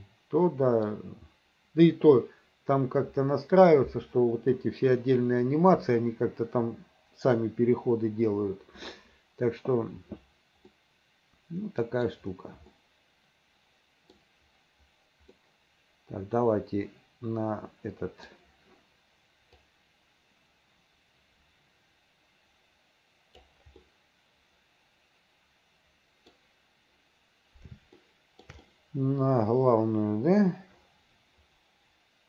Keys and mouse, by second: 10.9-12.2 middle drag, 12.8-14.2 middle drag, 15.4-18.4 middle drag, 19.7-23.6 right drag, 23.9-26.4 middle drag, 28.1 shift+middle click, 28.7-32.2 middle drag.